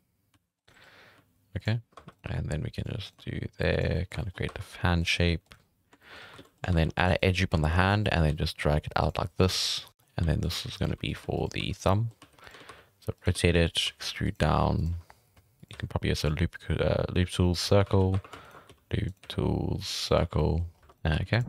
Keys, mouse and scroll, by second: 0.3-3.2 typing, 2.1 right click, 3.1 right click, 3.9 scroll down 1, 3.9 shift+middle click, 4.3 scroll up 3, 4.5 2, 5.0 right click, 5.3 g, 5.6-6.0 scroll down 3, 5.7-6.2 middle drag, 6.2 scroll up 5, 6.4-6.7 middle drag, 6.7 ctrl+r, 7.4 middle click, 7.5 2, 7.8 right drag, 8.0 middle drag, 8.3 g, 9.2 middle drag, 9.4-15.6 typing, 9.6 right click, 9.8-10.1 middle drag, 11.9 middle click, 17.8 alt+a, 18.1 1, 18.4 alt+shift+right click, 18.6 s, 19.2 w, 20.2 alt+a, 20.2 scroll down 1, 20.3 middle click, 20.7 scroll up 1, 20.8 right click, 21.1 g, 21.4 r.